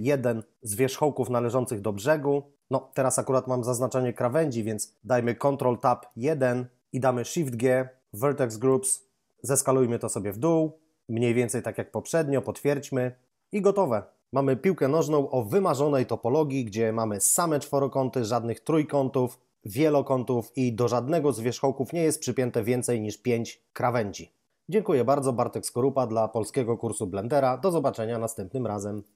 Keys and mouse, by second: 0.2 right click, 5.7 ctrl+Tab, 6.1 1, 7.4 shift+g, 8.5 click, 9.5 s, 12.3 click, 14.2 a.